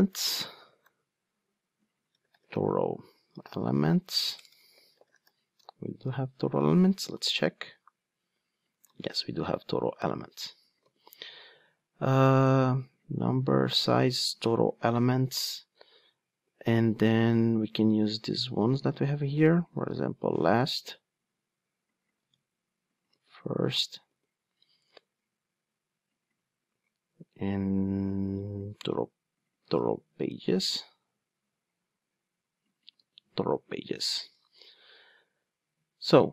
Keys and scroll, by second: 10.8 super+v, 19.0 super+c, 19.7 super+v, 22.2 super+c, 23.1 super+v, 29.6 super+c, 30.6 super+v.